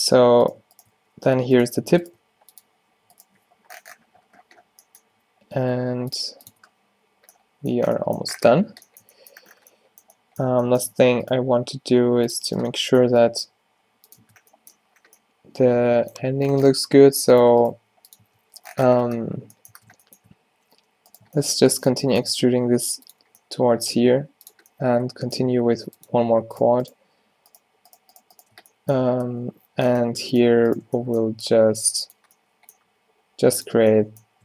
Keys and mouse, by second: 1.0 f, 2.3 g, 3.6 z, 5.2 d, 5.7 s, 6.3 g, 6.6 Tab, 11.3 Tab, 11.7 g, 13.6 g, 14.3 Tab, 16.9 Tab, 17.8 g, 18.3 Tab, 19.8 Tab, 22.4-25.5 typing, 29.4 f, 31.4 e, 32.3 z, 32.9 g, 33.8 z.